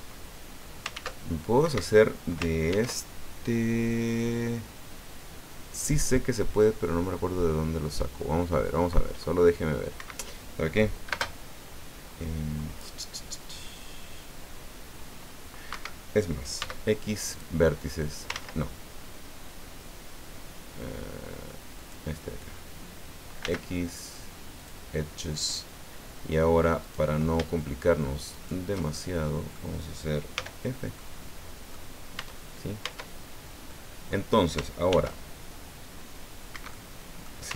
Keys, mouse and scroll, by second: 0.9 ctrl+w, 1.6 Escape, 2.7 ctrl+e, 9.9 Escape, 11.1 space, 15.7 Escape, 16.6 x, 17.3 click, 18.3 ctrl+z, 21.7 click, 23.4 x, 24.6 click, 26.8 right click, 28.3 shift+right click, 28.8 shift+middle click, 30.3 f, 31.0 click, 32.2 Tab, 32.8 Tab, 33.7 click, 34.9 ctrl+r, 36.5 Escape, 36.7 click.